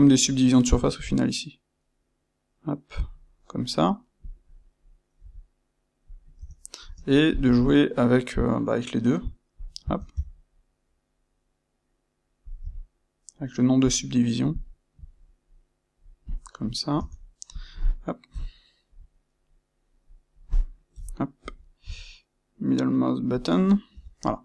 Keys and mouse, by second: 3.0 click, 4.2 click, 5.1 g, 6.1 click, 6.3 Tab, 6.8 space, 14.6-16.2 shift+middle drag, 16.2 click, 16.6-17.4 middle drag, 16.9 Tab, 17.4 click, 18.2 KP_1, 19.8-23.4 middle drag, 20.8 KP_1, 21.8 g, 23.4 click, 23.8 Tab, 24.2-24.4 middle drag.